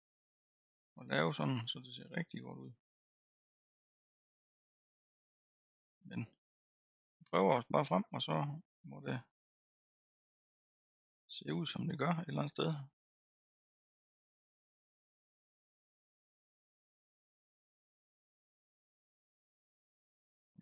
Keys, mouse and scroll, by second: 1.5-5.9 drag, 6.3-11.5 drag, 11.5-12.9 middle drag, 12.9-17.4 drag, 17.4-20.3 middle drag, 20.3-20.6 drag.